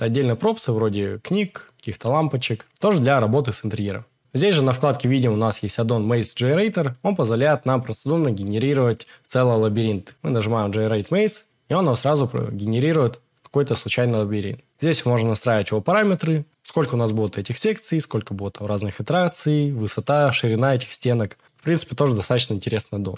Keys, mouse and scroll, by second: 0.5 click, 1.5 click, 2.8 g.